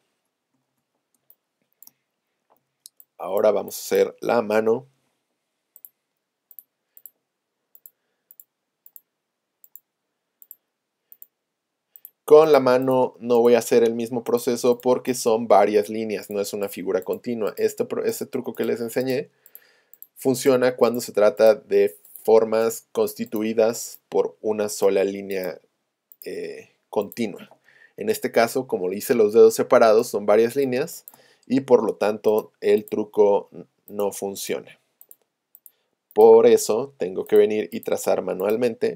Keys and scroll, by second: 2.6 z, 29.9 space.